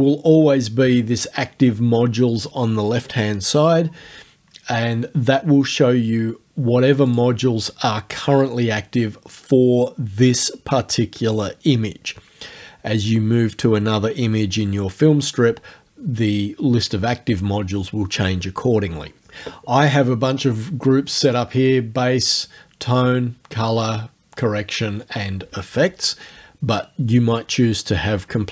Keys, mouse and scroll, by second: 7.1 click.